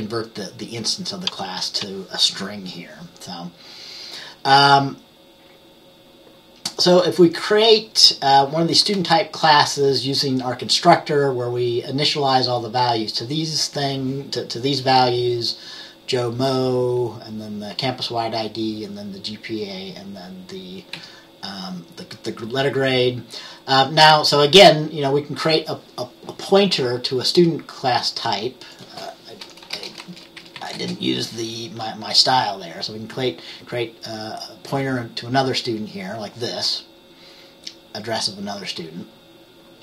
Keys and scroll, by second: 21.1 F10, 29.8 BackSpace, 30.8 Right, 30.9 space.